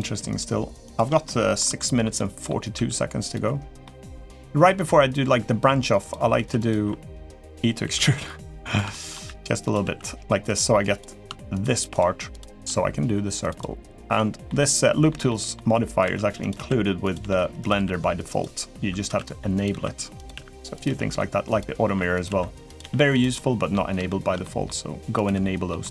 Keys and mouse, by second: 0.0 shift+click, 0.6 shift+click, 1.0-1.4 middle drag, 1.5 shift+middle drag, 1.9 middle click, 2.5 e, 3.6 middle click, 4.4 g, 6.1 s, 6.6 e, 7.6 s, 8.7 shift+middle click, 9.0 e, 9.6 s, 10.7 click, 11.3 shift+click, 11.7 shift+click, 13.2 click, 14.2 middle click, 15.0 middle click, 15.8 e, 16.3 s, 17.0 g, 17.5 r, 18.8 e, 19.5 s, 20.5 r, 20.6 g, 21.9 e, 22.5 s, 22.7 g, 23.1 middle click, 23.8 shift+middle click, 24.2 middle click, 25.5 middle click.